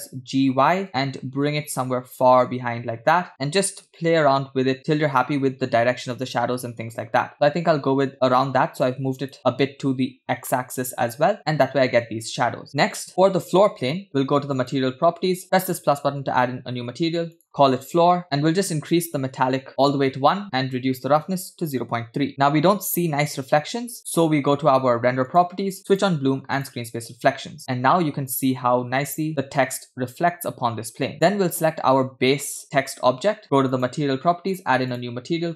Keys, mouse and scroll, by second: 3.3 g, 10.5-11.1 middle drag, 11.2-11.6 scroll up 5, 12.6-13.0 middle drag, 13.1 click, 14.6 click, 16.1 click, 17.7 shift+click, 18.2 scroll down 3, 18.2 o, 18.9 click, 20.6-22.3 drag, 25.2 click, 26.0 click, 26.8 click, 31.2 click, 32.5-33.4 scroll up 3, 33.7 click, 34.6 click, 35.2 click.